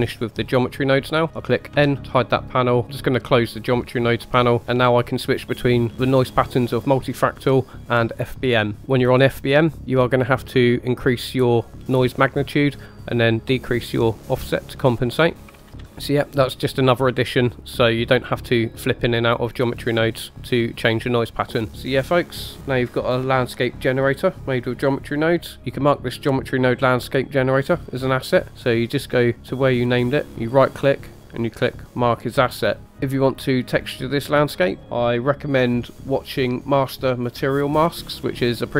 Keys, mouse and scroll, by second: 0.0-1.7 typing, 0.2 click, 3.0 click, 8.1 click, 10.8-12.7 drag, 13.3-15.4 drag, 15.5 ctrl+z, 15.7 ctrl+z, 15.8 ctrl+z, 21.7-23.3 middle drag, 30.4-32.8 right drag.